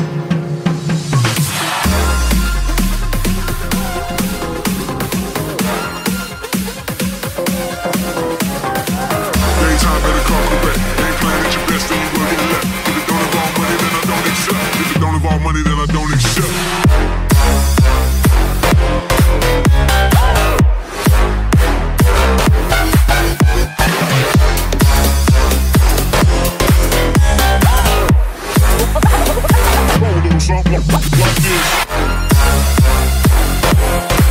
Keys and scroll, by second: 2.9 ctrl+space, 3.5 1, 7.2 shift+/, 23.6 space, 24.1 space, 24.4 space, 32.1 alt+space, 32.6 space, 33.4 space.